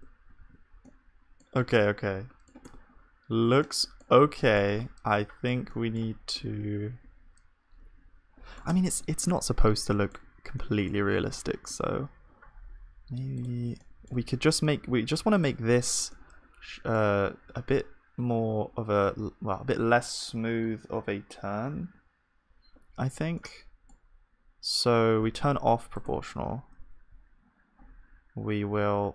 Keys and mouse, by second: 0.0 Tab, 0.4 ctrl+s, 2.7 Tab, 7.1-8.4 middle drag, 8.8 Tab, 9.0-12.6 middle drag, 13.8-23.4 drag, 13.8-28.9 middle drag, 28.9 g.